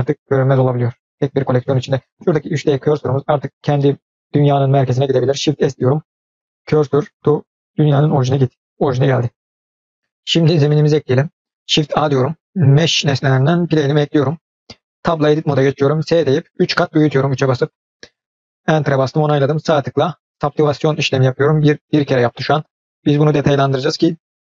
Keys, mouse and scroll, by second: 0.4 drag, 0.8 click, 1.2 click, 5.4 shift+s, 12.4 shift+a, 15.1 Tab, 16.0 s, 19.2-21.2 right drag, 23.3 click.